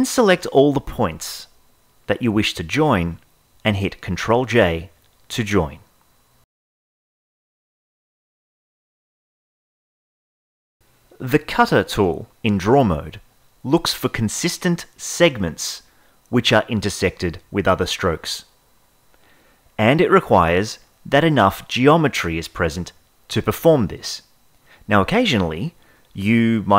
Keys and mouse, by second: 4.6 ctrl+j, 11.4 click, 11.4 n, 13.0 click, 14.2-15.5 drag, 20.1 n, 21.6 click, 22.1 click, 23.6 ctrl+z, 24.4-25.7 drag, 25.9 ctrl+z.